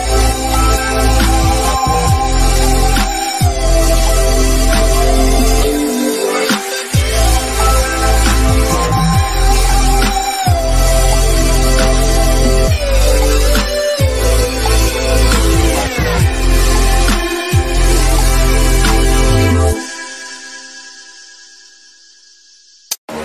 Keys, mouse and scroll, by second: 0.2 scroll up 1, 0.6 click, 0.8-1.3 scroll down 2, 0.9 middle click, 1.3 middle click, 1.7-2.2 scroll down 1, 2.4 click, 4.8 click, 5.9-6.8 typing, 6.8 click, 7.5 shift+middle click, 7.8 click, 8.2 scroll down 1, 8.3 scroll up 1, 8.4 middle click, 8.4 scroll, 8.9 click, 9.4 g, 9.6 click, 11.0-11.9 scroll up 2, 11.2 middle click, 11.9 click, 13.1 scroll down 1, 13.4 shift+middle click, 13.9 click, 14.4 click, 15.1-15.4 scroll up 1, 16.1 click, 16.4-16.8 scroll up 1, 17.1 Return, 18.0 scroll down 1, 18.1 middle click, 19.3 click, 20.9 click, 21.5 click, 22.1 click, 23.0 click.